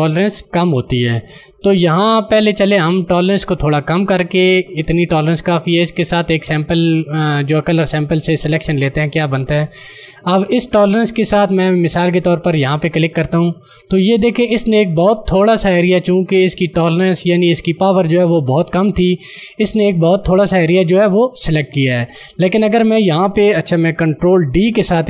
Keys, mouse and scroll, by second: 12.9 click, 24.7 d.